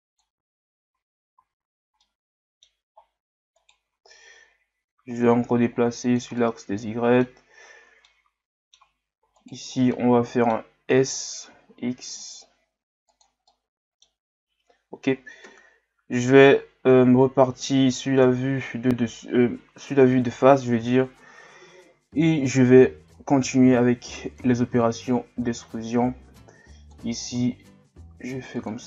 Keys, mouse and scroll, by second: 1.7-2.0 scroll down 1, 2.0-2.9 middle drag, 2.9-3.6 scroll up 3, 3.6 right click, 3.9 Tab, 5.3-6.4 drag, 6.4-8.0 middle drag, 8.0 scroll up 1, 8.1-9.4 middle drag, 9.4 alt+right click, 10.0-11.4 middle drag, 11.4 s, 13.5-15.4 middle drag, 15.4 KP_7, 18.2 KP_1, 21.0-21.6 scroll down 3, 21.8 scroll down 1, 22.9 scroll down 3, 23.6 e, 24.8-27.3 drag, 27.3 s.